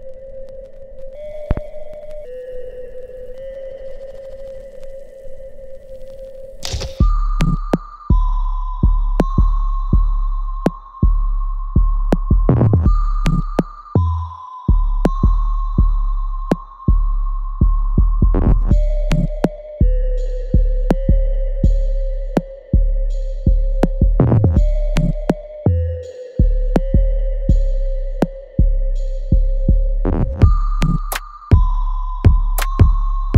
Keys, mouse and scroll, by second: 0.1 click, 1.8-4.4 ctrl+drag, 4.4-6.7 ctrl+drag, 6.7-11.2 ctrl+drag, 11.2 alt+right click, 11.7 alt+click, 12.8 alt+right click, 14.0 click, 16.3 alt+middle click, 16.9-18.8 alt+right drag, 18.8 click, 21.9 click, 25.1 right click, 26.8 click, 27.1 alt+right click, 27.5 alt+click, 28.6 right click, 29.8 click.